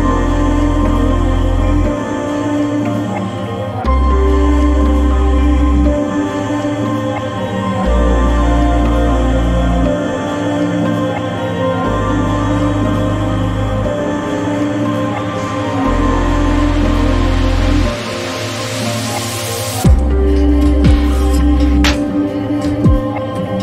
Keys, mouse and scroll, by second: 4.6 click, 14.1 ctrl+scroll up 1, 15.6-15.9 ctrl+scroll up 1, 16.8 click.